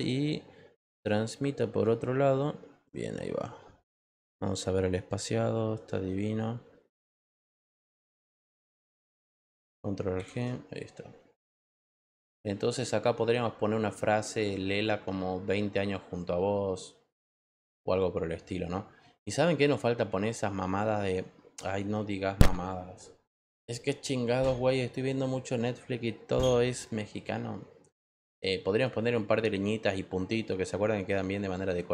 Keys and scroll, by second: 10.1 ctrl+alt+g.